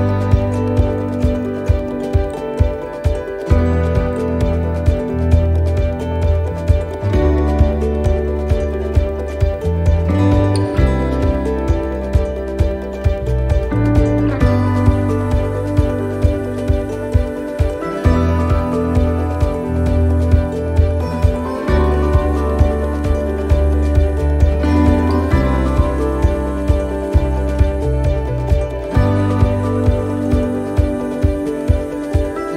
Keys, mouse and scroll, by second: 0.7 click, 1.5 right click, 1.9 shift+right click, 2.2 shift+right click, 3.2 c, 10.0 shift+middle click, 11.0-11.4 scroll up 1, 11.4 middle click, 14.7 shift+right click, 15.4 shift+right click, 15.8 shift+middle click, 20.0 shift+right click, 20.5 shift+right click, 21.0 middle click, 21.6 scroll down 1, 22.0 shift+middle click, 22.6 middle click, 23.1-23.4 scroll down 2, 23.5 shift+middle click, 25.5 e, 30.5 middle click, 31.3 scroll up 2, 31.8 middle click.